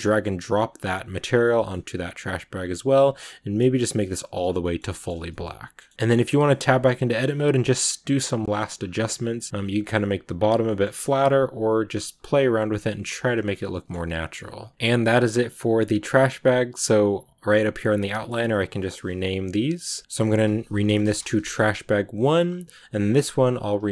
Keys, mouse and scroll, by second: 0.3 click, 1.2 scroll up 1, 1.3-3.5 middle drag, 3.5 click, 4.3 scroll down 1, 4.5 middle click, 5.1 a, 5.2 middle click, 5.9 right click, 6.1 Tab, 6.6 shift+middle click, 6.9-7.3 scroll up 1, 7.3 right click, 7.5 g, 9.3 middle click, 9.6 right click, 9.7 g, 10.5 shift+middle click, 11.2 right click, 11.3-14.7 typing, 12.0 right click, 12.7 right click, 13.3 Tab, 13.3 scroll up 1, 13.3 scroll down 1, 13.5 middle click, 13.9 scroll down 1, 14.0 middle click, 14.7-17.0 middle drag, 17.0 click, 18.1-20.0 drag, 21.0-22.3 drag, 22.3 right click, 23.3-23.9 drag.